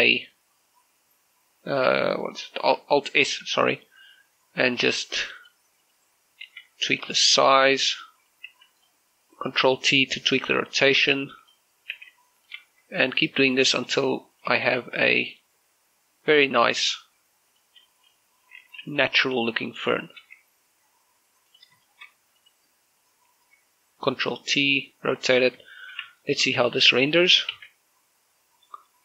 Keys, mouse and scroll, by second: 0.3 right click, 4.0 alt+s, 6.2 click, 6.6 right click, 7.3 alt+s, 7.7 click, 8.0 shift+middle click, 8.3 middle click, 9.0 right click, 9.3 alt+s, 9.6 click, 10.7 ctrl+t, 12.2 click, 12.7 alt+s, 13.2 click, 13.8 middle click, 14.1 shift+middle click, 14.7 right click, 15.1 shift+right click, 15.5 w, 16.1 click, 17.2 right click, 17.9 g, 18.3 click, 19.4 alt+t, 21.0 ctrl+t, 22.3 click, 22.7 shift+middle click, 23.2 right click, 24.2 ctrl+t, 26.0 click, 26.2 scroll down 1, 26.5 shift+middle click, 26.8 Tab, 27.0-28.3 middle drag, 28.3 shift+z.